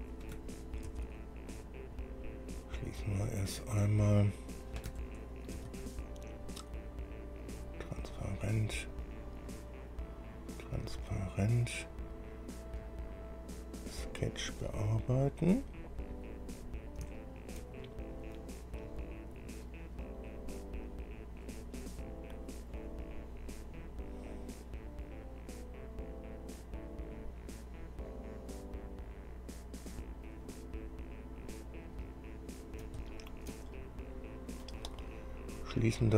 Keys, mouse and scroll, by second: 1.1 ctrl+d, 2.5 click, 4.2 click, 5.8 ctrl+d, 7.6 click, 9.1 click, 11.2 click, 13.0 scroll down 2, 14.1 click, 15.5 click, 16.7-17.0 scroll down 2, 17.4 shift+middle click, 18.1-18.6 shift+scroll up 3, 19.0-19.7 scroll up 4, 24.0-26.9 drag, 28.3-30.6 drag, 30.9 scroll down 2, 31.6 scroll down 2, 32.2-33.9 middle drag, 34.2 middle click, 36.0 click.